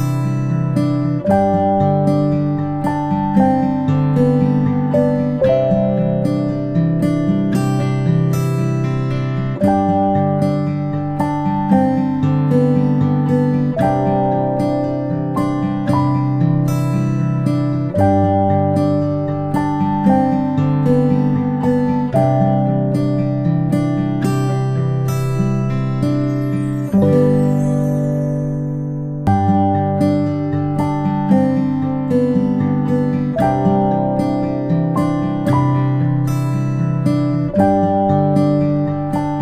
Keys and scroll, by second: 0.3 ctrl+], 0.5 ctrl+], 0.7 ctrl+[, 23.9 ctrl+shift+g.